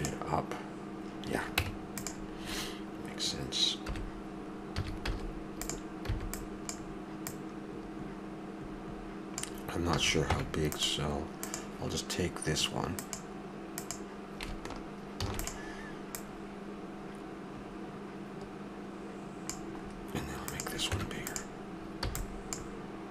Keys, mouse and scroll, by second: 1.6 Tab, 3.8 KP_1, 4.7 a, 5.1 z, 6.1 b, 7.3-9.2 drag, 9.9 a, 10.3 Tab, 15.2 shift+d, 19.8-20.5 middle drag, 20.5-22.4 drag, 20.9 Tab, 21.9 b.